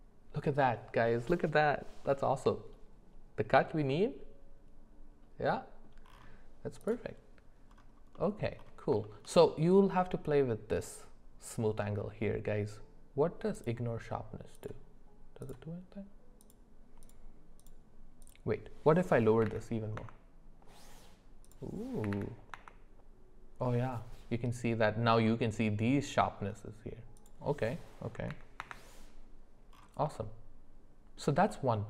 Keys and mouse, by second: 2.0 middle click, 3.9-5.8 middle drag, 8.1 middle click, 9.0 shift+middle click, 9.4 middle click, 13.7-20.1 drag, 21.4-22.7 drag, 27.3-28.7 drag, 30.1-31.1 middle drag.